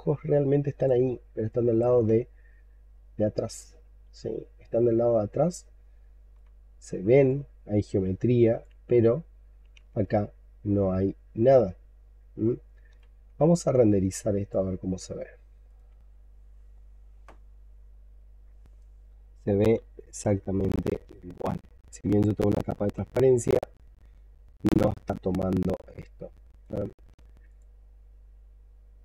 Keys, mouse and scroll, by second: 0.9-1.3 alt+scroll up 5, 1.3 alt+click, 1.9 shift+right click, 6.4-7.0 shift+scroll down 10, 7.1 alt+click, 8.9-9.6 scroll up 6, 9.9 shift+right click, 13.4 alt+middle click, 14.0 alt+click.